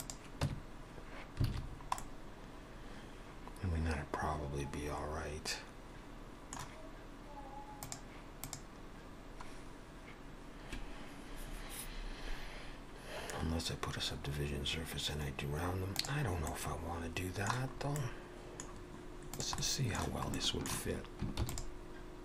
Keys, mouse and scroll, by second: 0.5 Tab, 1.5 alt+a, 1.7-3.1 scroll down 3, 2.0 middle click, 6.0 middle click, 16.5 middle click, 17.8-18.6 scroll up 3, 18.0 middle click, 18.7-19.3 scroll down 4, 19.3 click, 19.6 middle click, 20.4 shift+middle click, 21.4 shift+d.